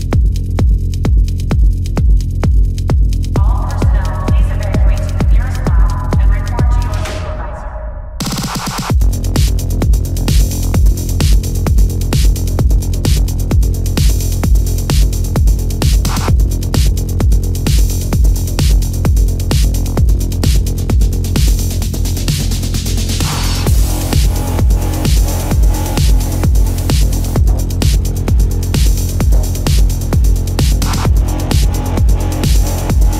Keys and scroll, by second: 0.2 space, 0.9 space, 2.1 space, 3.3 space, 3.7 ctrl+-, 4.4 ctrl+-, 6.2 ctrl+-, 6.4 space, 6.8 ], 7.5 ], 8.5 ], 9.8 space, 11.5 space, 15.1 space, 15.9 space, 17.2 space, 18.3 ctrl+alt+z, 19.7 space, 21.5 space, 22.5 space, 23.0 ctrl+alt+z, 24.4 space, 26.3 space, 27.9 space, 30.4 space, 32.1 space.